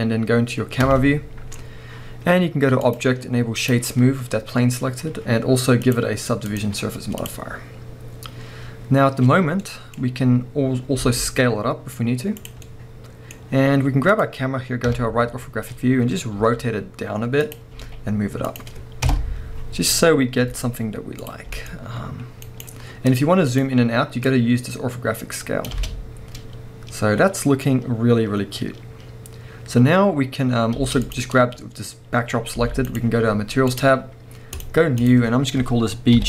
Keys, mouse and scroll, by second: 0.8 KP_0, 1.6-2.8 scroll up 1, 2.8-9.6 drag, 8.2-9.6 scroll down 1, 9.6-12.5 middle drag, 10.0 scroll down 1, 11.0 s, 12.5 click, 12.6-14.1 middle drag, 14.1 click, 14.8 KP_3, 15.5-16.1 scroll up 1, 16.3 r, 17.6 click, 17.8 g, 18.6 click, 19.1 KP_0, 19.8-20.4 scroll up 1, 20.4 g, 21.3 click, 21.5 g, 22.6 right click, 23.5-31.5 drag, 25.7 space, 25.9 space, 30.7 space, 31.5-32.1 scroll down 1, 32.6 g, 32.9 right click, 33.7-36.2 drag.